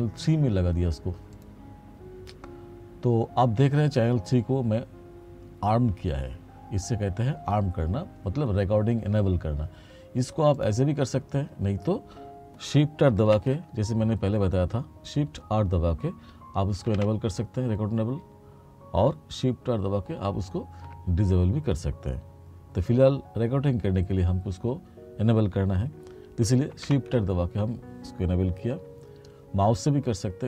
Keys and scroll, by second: 13.4 shift+r, 17.0 shift+r, 20.3 shift+r, 26.9 shift+r.